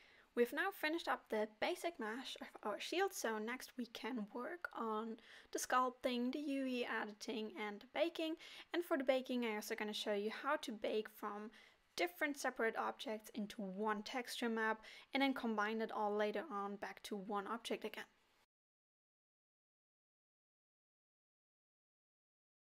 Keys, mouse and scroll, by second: 0.6 middle click, 4.4-4.7 scroll down 3, 4.6 middle click, 5.3 Tab, 6.7 click, 7.2 click, 7.8 click, 9.8 click, 10.4 middle click, 11.0 alt+a, 12.0 click, 13.0 click, 13.7 middle click, 16.9-17.4 scroll up 1.